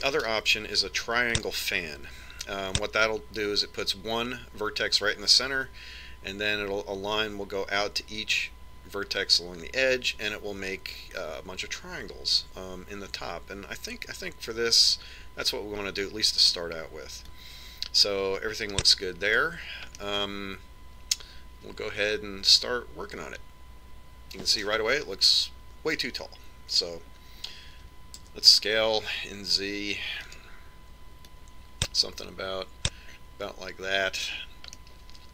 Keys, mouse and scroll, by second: 1.3 click, 18.7 click, 21.4-23.3 middle drag, 29.2 s, 32.8 click.